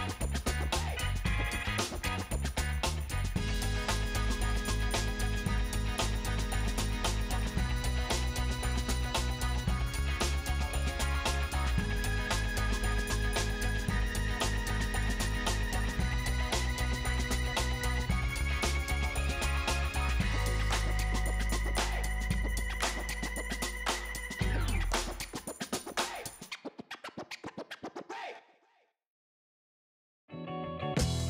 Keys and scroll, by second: 7.1 alt+shift+2, 7.5 Return, 13.4 shift+Down, 13.6 shift+Down, 16.2 shift+Up, 16.5 shift+Up.